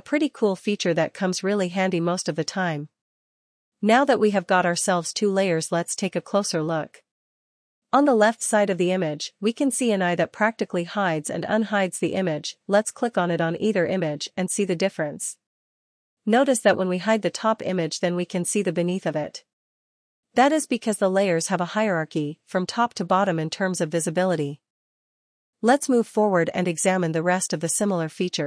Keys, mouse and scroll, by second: 3.8 click, 4.8 click, 6.8 click, 12.3 click, 13.5 click, 14.7 click, 25.4 click, 25.9 click.